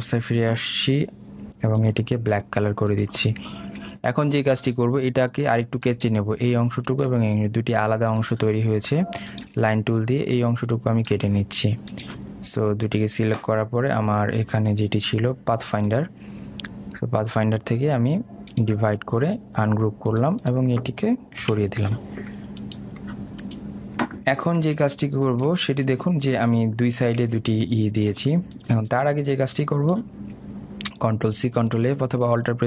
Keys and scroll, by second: 8.1 ctrl+z, 22.6 Delete.